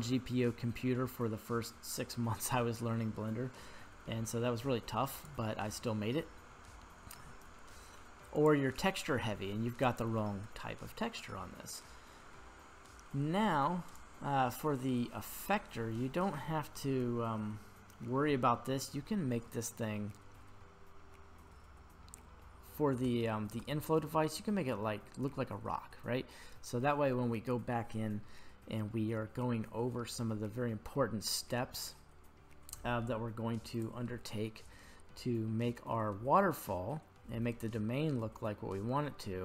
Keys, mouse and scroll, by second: 5.2 click, 8.6 drag, 11.6 middle click, 12.1-12.9 middle drag, 13.0 scroll down 1, 13.9-15.2 right drag, 19.5-20.5 middle drag, 22.8 scroll down 1, 22.9 shift+middle click, 24.0 scroll up 2, 31.0 scroll down 1, 33.8 click, 34.9-35.9 middle drag, 36.4-36.8 scroll up 1.